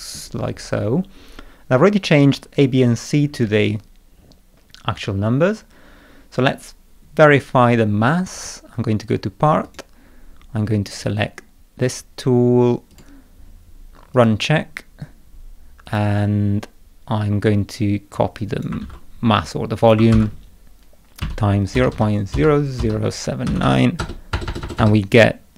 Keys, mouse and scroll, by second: 2.4-3.8 scroll down 7, 4.1 middle click, 4.7 scroll up 2, 8.3 click, 9.6 click, 10.6 scroll down 2, 10.9 click, 12.9 click, 14.1 click, 15.8 click, 18.1 click, 18.8 ctrl+c, 19.8 click, 20.1 ctrl+v.